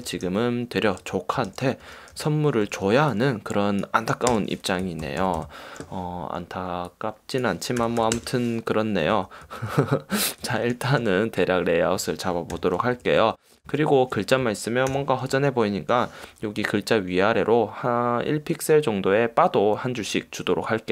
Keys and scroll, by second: 0.2 super+;, 0.4 super+t, 1.2 ;, 2.0 super+t, 4.5 Return, 5.0 shift+Down, 7.7-8.7 typing, 9.3 shift+Down, 10.3 shift+Up, 10.6 shift+Down, 12.7 super+;, 13.2 super+-, 13.8 alt+super+0, 15.1 super+=.